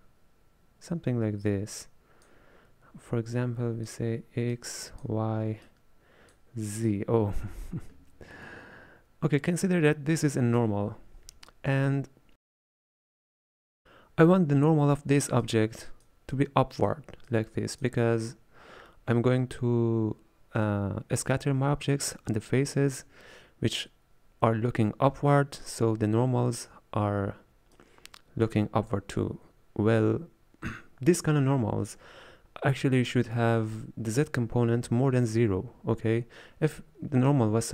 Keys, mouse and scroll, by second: 27.8-30.8 drag.